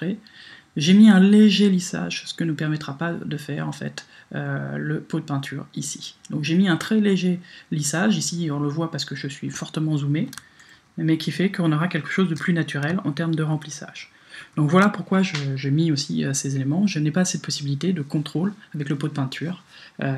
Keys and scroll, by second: 10.7 super+-, 13.5 super+-.